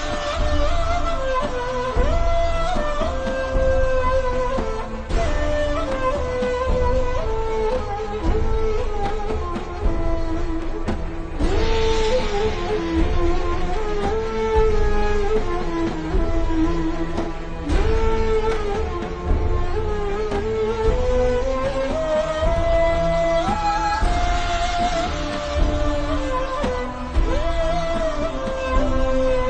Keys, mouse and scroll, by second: 0.2 ctrl+z, 0.9 z, 1.2 z, 1.5 click, 4.3 click, 9.2-9.8 scroll up 1, 9.8 click, 10.4-10.8 ctrl+scroll down 2, 10.8-11.2 scroll up 1, 21.6 i, 21.7 click, 22.0 v, 22.1 click, 25.8 alt+shift+scroll down 1, 27.0-27.4 alt+shift+scroll up 2, 27.4 click, 29.3-29.4 scroll down 1.